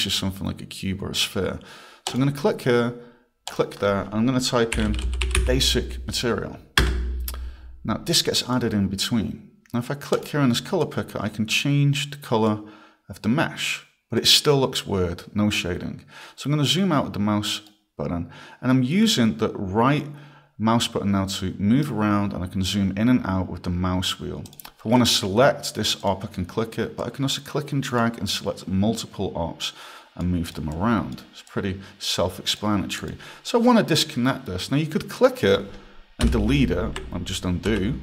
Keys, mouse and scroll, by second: 2.1 click, 3.5 click, 4.5-5.9 typing, 6.8 Return, 8.1 click, 10.2 click, 16.5 scroll, 17.7 right click, 22.3 scroll, 23.3 scroll, 24.5 click, 26.0 click, 27.0 click, 28.4 click, 30.5 click, 30.7 click, 31.5 click, 33.0 click, 35.2 click, 37.7 ctrl+z.